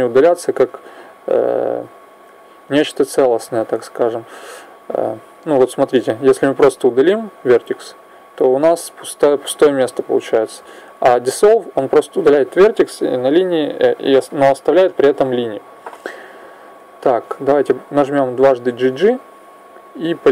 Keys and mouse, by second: 0.8 right click, 1.6 click, 3.4 right click, 4.3 click, 6.4 x, 10.4 ctrl+z, 16.1 right click, 18.4 g.